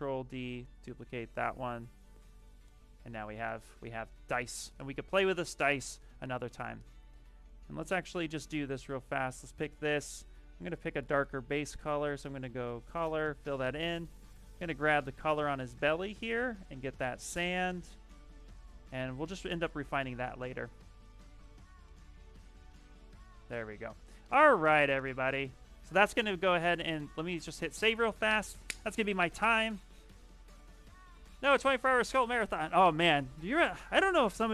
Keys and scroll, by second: 1.2 ctrl+z, 3.1 q, 8.1 shift+f, 9.1 shift+f, 9.4 shift+f, 14.2 c, 19.4 s, 21.0 s.